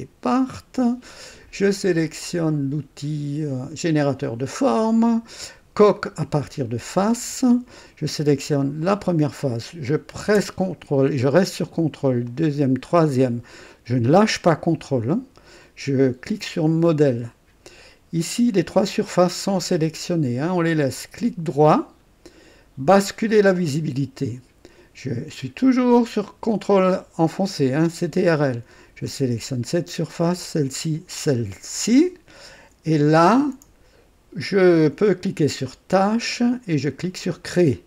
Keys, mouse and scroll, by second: 3.8 click, 6.9 click, 8.8 click, 12.2 ctrl+click, 12.9 ctrl+click, 17.0 ctrl+click, 21.5 ctrl+right click, 23.5 ctrl+click, 29.1 ctrl+click, 30.2 ctrl+click, 31.1 ctrl+click, 36.0 ctrl+click, 37.4 click.